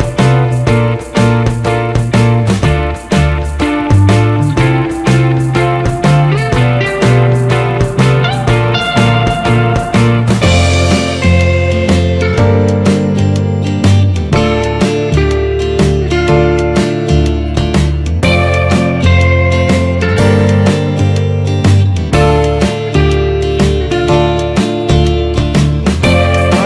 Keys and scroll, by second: 0.2 ctrl+z, 2.6 Return, 17.3 ctrl+z, 24.0 ctrl+z.